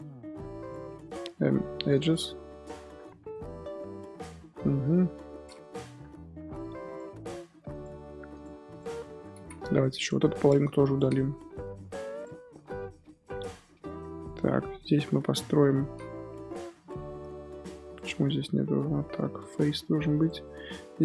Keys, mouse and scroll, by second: 1.3 x, 2.7 1, 3.0 z, 3.3-4.3 middle drag, 4.3 scroll down 2, 4.6 scroll up 2, 4.8 KP_7, 5.3 scroll up 2, 6.5 2, 6.8 alt+click, 7.7 click, 8.3 shift+click, 8.7 shift+click, 9.1 scroll down 3, 9.3 z, 9.6 1, 9.8 click, 10.7 shift+click, 11.1 x, 12.6 scroll up 2, 13.1 2, 14.5 1, 14.9 click, 15.4 scroll up 2, 16.2 2, 16.7 alt+click, 17.5 shift+click, 17.8 shift+click, 18.3 f, 18.7 Tab, 19.2 1, 19.5 Tab, 20.0 1, 20.2 click.